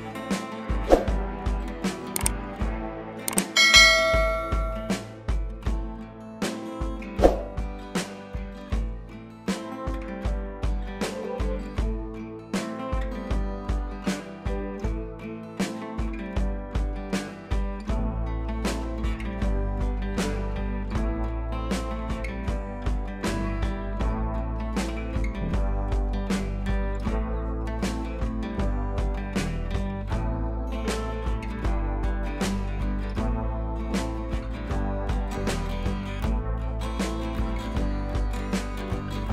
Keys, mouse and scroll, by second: 0.8-1.6 drag, 2.0-2.7 scroll up 2, 2.7 scroll up 1, 2.9-3.2 scroll down 2, 3.2-4.6 scroll up 2, 5.6-7.2 drag, 9.0 ctrl+t, 9.6-10.6 drag, 11.6 scroll down 1, 12.1-12.8 drag, 17.2 click, 18.9 click, 19.8 ctrl+i, 21.0 click, 22.5 scroll up 1, 22.7 ], 23.0 ], 23.2 click, 23.9 ctrl+z, 24.6-25.8 click, 26.0 scroll up 1, 26.0-29.4 typing, 26.2 click, 26.7 click, 27.7 click, 28.6 click, 29.4 click, 30.4 space, 30.5 click, 31.7 [, 31.8 [, 31.9 click, 33.2 [, 33.2 [, 33.3 click, 36.4 click.